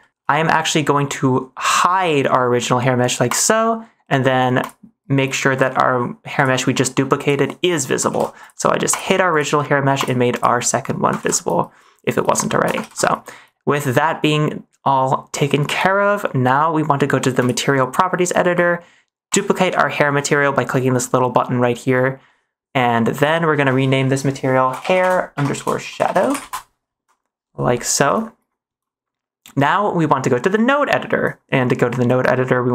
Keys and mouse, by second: 3.2 click, 4.5 click, 6.3 click, 8.1 ctrl+s, 8.3 click, 8.8 click, 9.9 click, 10.3 click, 12.4 shift+middle click, 12.8 ctrl+s, 14.0 middle click, 17.3 click, 23.1-26.4 drag, 28.0 ctrl+s.